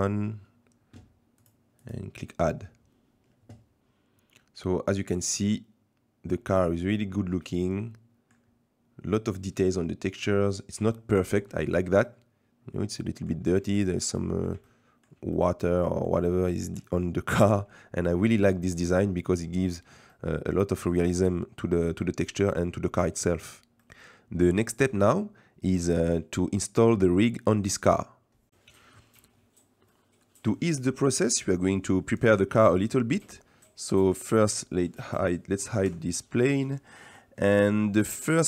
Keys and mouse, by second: 1.4 click, 1.8 click, 5.2-8.4 middle drag, 9.7 shift+middle click, 10.9 shift+middle click, 12.1-13.3 middle drag, 13.7 shift+middle drag, 14.2 middle drag, 14.7-15.1 shift+middle drag, 15.3 middle click, 16.3-16.8 shift+middle drag, 17.1 middle click, 18.9 middle click, 20.1 middle click, 23.8 middle click, 29.9 middle click, 33.6 middle click, 34.5-35.9 middle drag, 35.9 h, 37.1-37.9 middle drag.